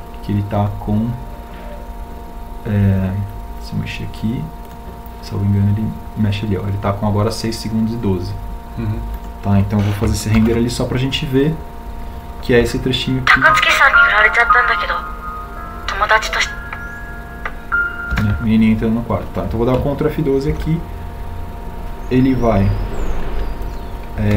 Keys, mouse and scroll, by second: 10.4 ctrl+alt+shift+l.